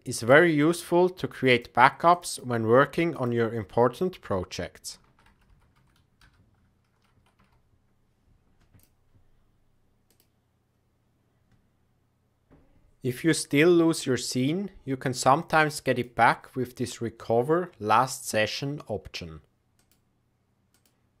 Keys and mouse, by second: 12.5 n, 15.9-21.2 drag.